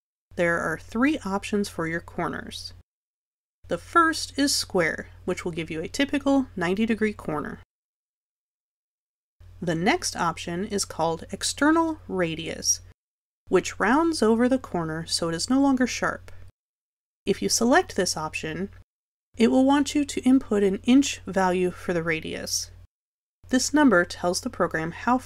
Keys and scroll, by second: 24.4 1.